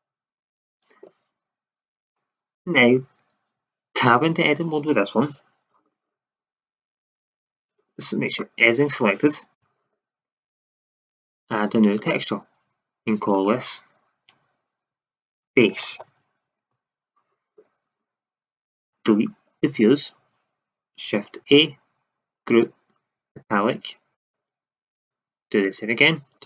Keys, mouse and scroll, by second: 4.0 Tab, 8.5 a, 9.5 a, 19.6 Delete, 21.3 shift+a, 24.1-26.4 drag.